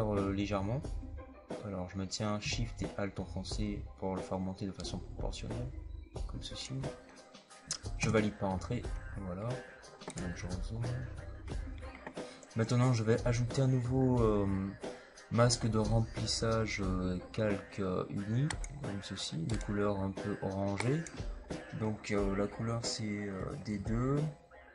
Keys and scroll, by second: 7.9 Return, 23.3 d, 23.6 KP_2.